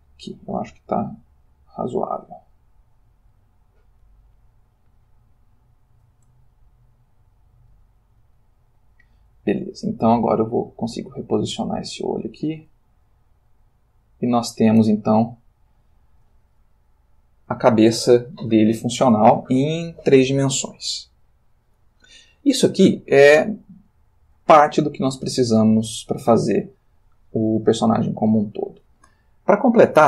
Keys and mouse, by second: 1.9-3.5 middle drag, 5.0 click, 6.6-7.9 ctrl+middle drag, 8.4 click, 9.5 g, 12.2 space, 13.1 click, 13.4 g, 14.2 click, 15.2-16.4 ctrl+middle drag, 17.2 click, 25.5-28.8 shift+middle drag.